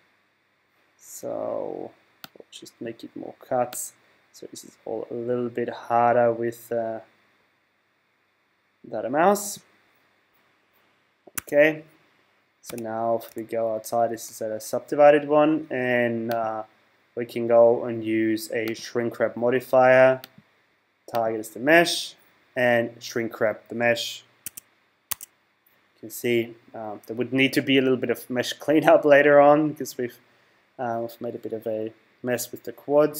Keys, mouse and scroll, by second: 3.7 click, 11.4 Tab, 12.6 z, 13.3 z, 14.1 z, 16.3 click, 20.2 click, 24.5 Tab, 25.1 Tab.